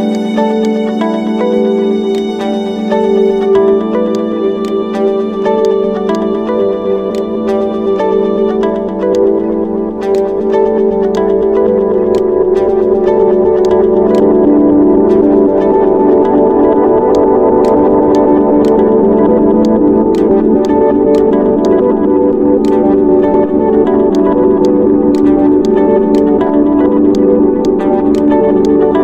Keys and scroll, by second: 4.3 s, 14.7-16.5 typing, 18.4 Escape.